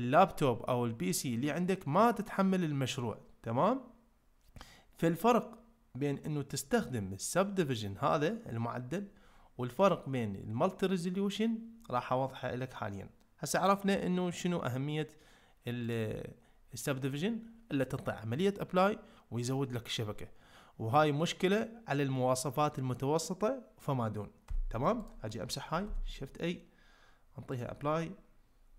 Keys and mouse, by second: 6.8-8.9 drag, 9.8-11.5 drag, 15.8-17.3 drag, 25.9 shift+a.